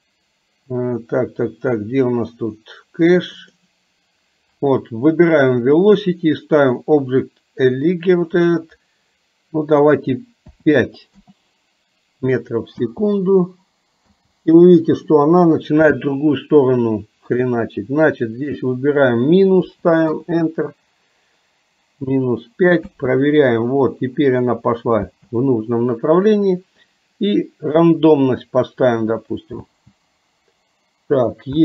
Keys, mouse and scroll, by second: 8.5-11.3 drag, 12.8 space, 14.2 space, 17.4-20.2 drag, 22.9 space, 25.2 space, 28.2-29.4 drag, 29.7 space, 31.5 space.